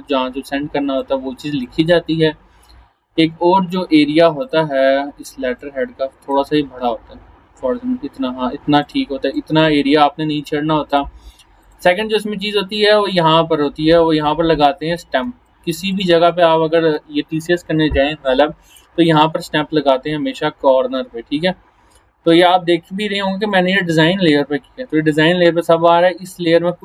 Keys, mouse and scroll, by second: 1.0 space, 1.0-1.9 click, 1.5 space, 4.4-6.5 drag, 8.8-10.0 drag, 15.2 space, 15.5 click, 15.7-16.1 space, 16.4-17.0 click, 16.8 space, 20.1-22.5 drag, 24.5-24.9 scroll down 1, 24.9-26.3 scroll up 1, 26.3 click.